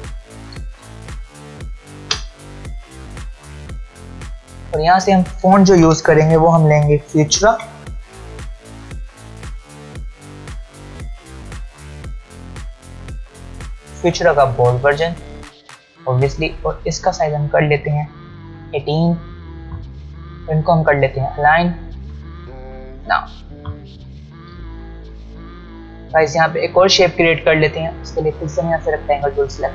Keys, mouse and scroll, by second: 0.5-2.7 typing, 4.7 click, 6.5 f, 14.4 click, 16.9 click, 24.0-24.8 alt+scroll down 2, 25.6-26.2 alt+scroll up 1.